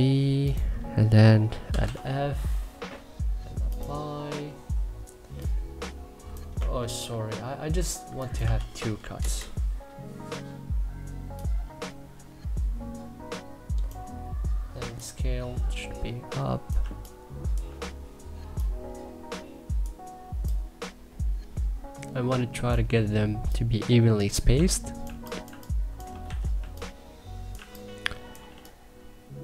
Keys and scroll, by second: 1.1-2.0 typing, 6.4 ctrl+z, 8.1 2, 8.8 Return, 16.4 3, 23.9-28.1 typing.